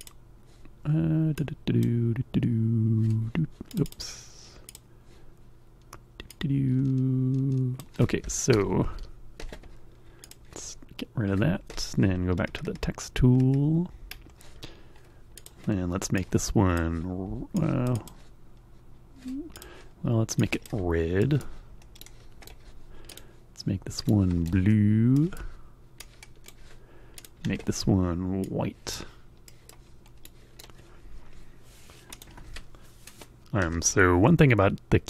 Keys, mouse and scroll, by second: 1.3 click, 3.7 click, 4.6 click, 6.2-7.9 drag, 8.2 Escape, 8.8 Escape, 10.2 click, 15.3 click, 16.1 click, 17.5 click, 19.4 click, 20.3 click, 21.1 middle click, 21.9 right click, 23.0 click, 24.0 right click, 25.0 middle click, 25.9 click, 27.1 click, 28.3 click, 29.4 middle click, 30.1 right click, 31.4 click.